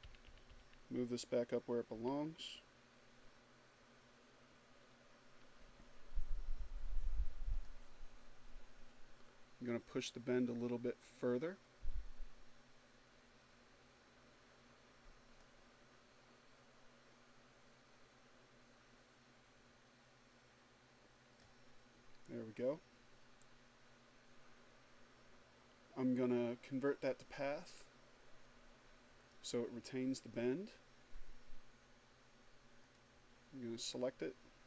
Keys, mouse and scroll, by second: 0.2 Up, 6.0 click, 9.9-20.2 drag, 26.1 click, 27.6 click, 31.1 click.